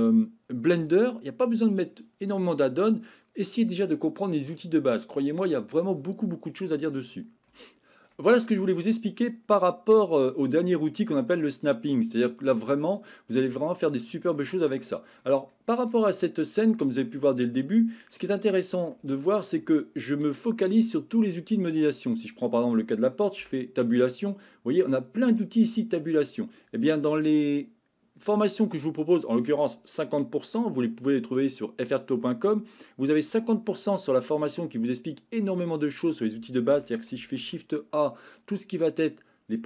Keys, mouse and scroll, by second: 7.6-8.0 shift+middle drag, 13.5-14.0 shift+middle drag, 14.3 shift+middle click, 14.9 shift+middle click, 15.5-15.8 shift+middle drag, 16.0-16.5 middle drag, 16.7-17.0 shift+middle drag, 18.3 middle click, 19.2 shift+middle click, 22.2 click, 23.4 Tab, 36.7 Tab, 37.4 shift+a.